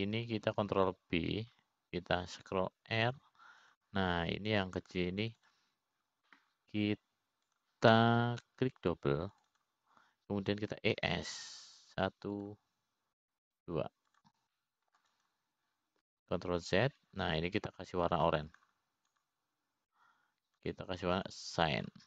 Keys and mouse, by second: 0.4 middle click, 1.5 click, 1.8 click, 3.2 ctrl+b, 6.2 click, 7.9 click, 10.1 click, 11.9 click, 12.2-13.4 drag, 13.4 e, 17.1 middle click, 17.1 e, 17.7 click, 19.1 ctrl+z, 21.9-22.0 drag.